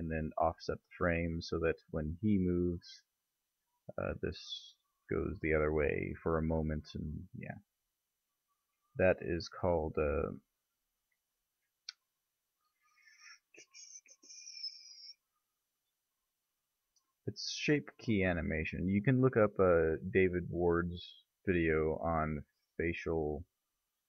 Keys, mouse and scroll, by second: 0.3-3.1 middle drag, 4.1 g, 7.9 ctrl+z, 9.1-10.9 right drag, 10.9 middle click, 11.0 right click, 11.1 middle click, 11.3-12.5 right drag, 12.5-15.7 drag, 15.3 middle click, 15.9 right click, 16.3 middle click, 16.5 click, 16.5 right click, 17.0-18.7 middle drag, 19.8-22.6 middle drag, 22.2 s.